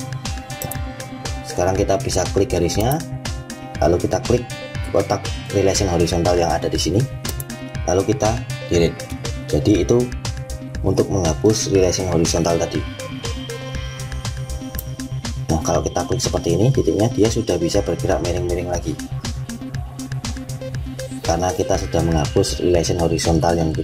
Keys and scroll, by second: 8.6 Delete.